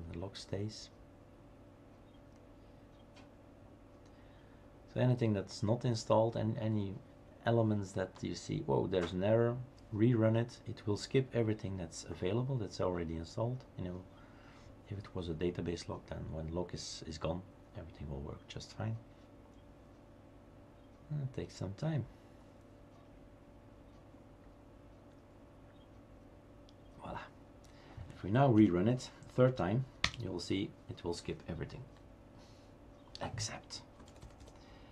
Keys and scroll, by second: 28.6 Up, 30.1 Return, 33.8-34.9 typing.